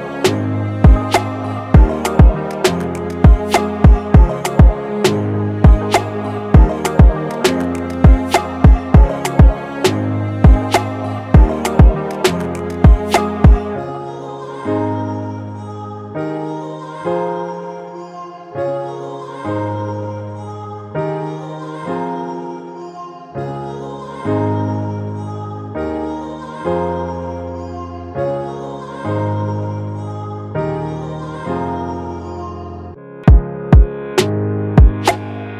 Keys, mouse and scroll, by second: 16.3-19.7 typing, 19.8 double click, 22.3 ctrl+t, 26.8 Return, 27.2 Up, 29.3 Down, 29.3 Up, 29.9 Up, 30.5 Down, 30.7 Down, 31.5 Left, 31.8 Left, 32.3 Left, 33.5 double click.